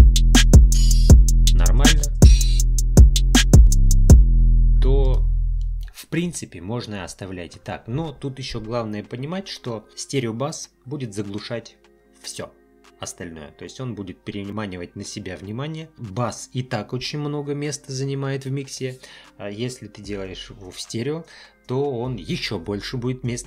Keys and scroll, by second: 4.2 space.